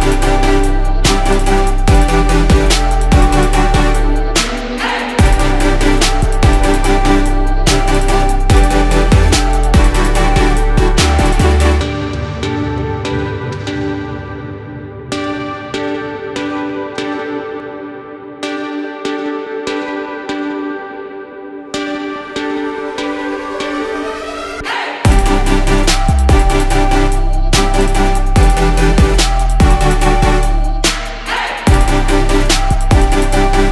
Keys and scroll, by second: 7.0 ctrl+0, 15.0 ctrl+z.